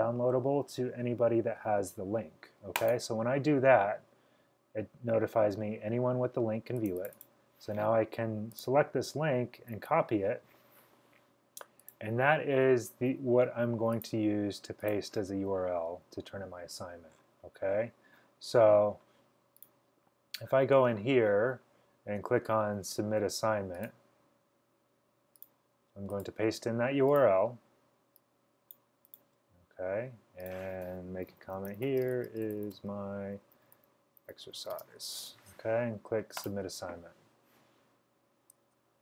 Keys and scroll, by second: 9.8 super+c, 31.5-35.5 typing.